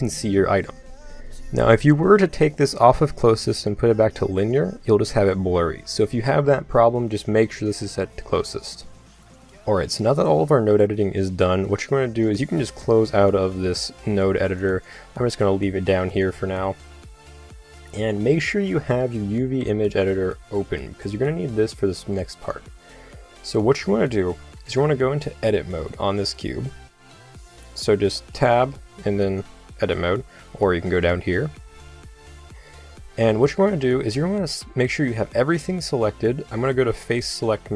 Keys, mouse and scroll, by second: 1.7-2.9 middle drag, 2.9 click, 9.3 click, 10.8-11.8 drag, 13.6-18.8 drag, 24.1-27.3 middle drag, 25.8 Tab, 27.9-30.5 middle drag, 28.3 Tab, 30.9 click, 34.6 a, 35.1 a.